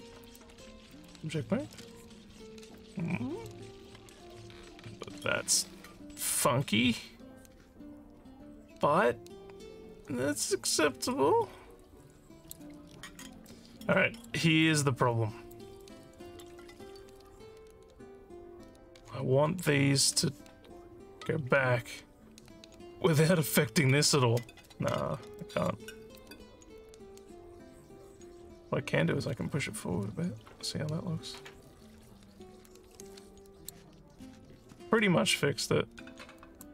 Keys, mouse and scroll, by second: 0.2 click, 1.0 click, 2.4 alt+scroll down 2, 2.8 alt+click, 3.9 alt+middle click, 4.3-12.5 alt+drag, 12.9 alt+scroll up 1, 13.5 alt+middle click, 14.6 alt+click, 15.8 alt+middle click, 17.2 scroll down 1, 25.1-25.4 alt+scroll up 2, 25.4 alt+middle click, 26.2-33.8 alt+drag, 33.9 alt+scroll up 1, 34.5 scroll, 35.0-36.6 alt+drag.